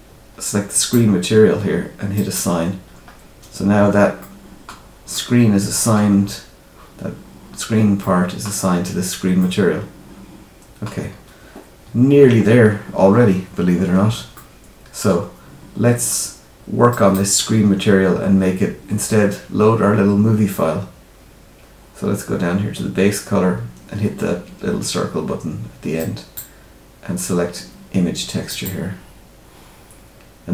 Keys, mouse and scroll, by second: 0.7 click, 2.1 click, 3.0-3.7 scroll down 2, 3.7 Tab, 4.1 middle click, 5.1 middle click, 7.9 middle click, 9.3 middle click, 13.4-13.7 scroll down 2, 13.7-14.1 scroll up 1, 14.3 middle click, 16.8 click, 21.3-24.2 scroll down 5, 25.9 click.